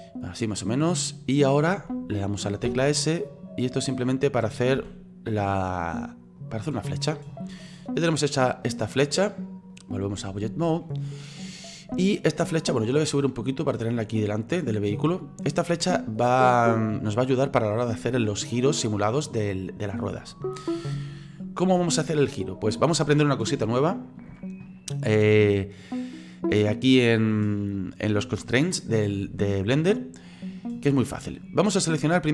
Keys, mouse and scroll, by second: 2.6 s, 4.9 s, 7.6-9.7 middle drag, 9.7-10.8 drag, 10.8-11.7 middle drag, 11.7 scroll down 4, 12.0-13.1 shift+middle drag, 13.1-14.2 drag, 14.2-16.2 middle drag, 16.2-16.6 scroll up 3, 16.6-27.1 middle drag.